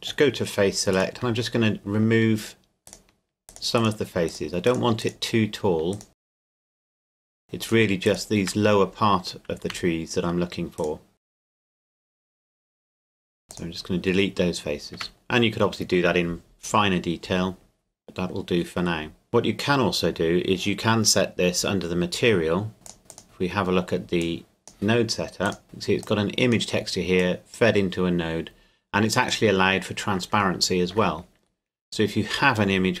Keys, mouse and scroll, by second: 0.9 right click, 2.9 shift+right click, 7.4 shift+right click, 10.8-12.0 shift+right drag, 12.8 shift+right click, 12.9 x, 13.5 click, 14.9 Tab, 19.3 click, 22.8 click, 25.6 shift+middle click, 26.0 click, 30.6 shift+middle click, 31.2-32.1 scroll up 1.